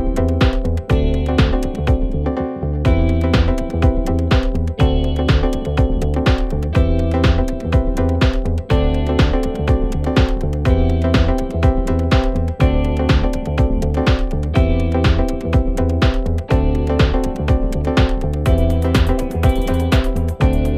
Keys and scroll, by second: 9.2 ctrl+z, 9.8 ctrl+z, 10.0 ctrl+z, 11.8 ctrl+z, 14.8 ctrl+z, 19.9 ctrl+z.